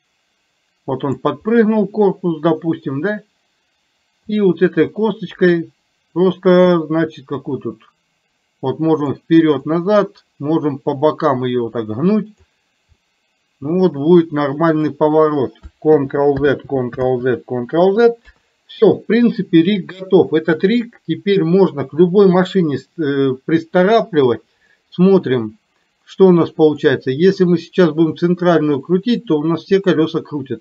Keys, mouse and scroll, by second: 1.5-3.0 middle drag, 4.3 click, 5.0 middle click, 7.6-9.2 drag, 9.8-12.6 drag, 13.1-15.0 middle drag, 16.6 ctrl+z, 17.2 ctrl+z, 18.2 KP_3, 28.1-30.6 drag.